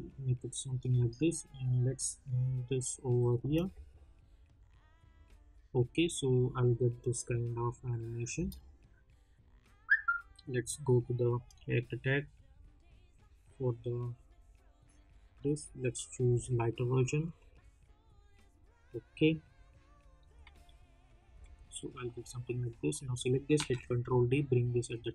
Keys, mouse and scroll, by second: 3.4 space, 8.3 space, 11.4-20.5 drag, 20.5 s, 21.2 s, 22.3 click, 23.5 ctrl+d, 24.0-25.1 drag.